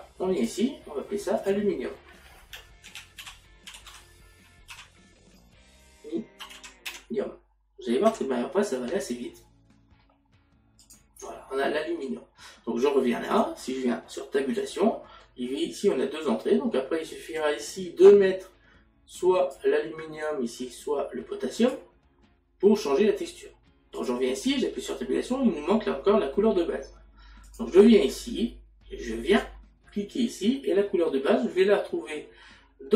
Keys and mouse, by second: 0.4 click, 2.1 click, 3.3 l, 6.9 u, 13.3 click, 17.4 click, 20.7 click, 24.0 click, 24.4 Tab, 27.5 click.